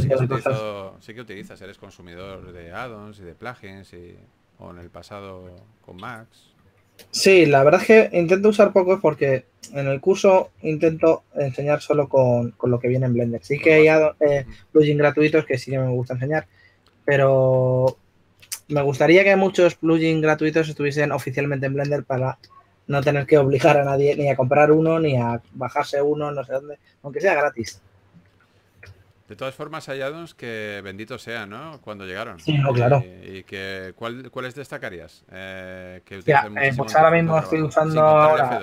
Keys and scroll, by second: 10.7-11.5 typing, 13.6 s, 19.4 s, 24.1-25.8 typing, 31.3 s, 33.6 2, 35.1 s.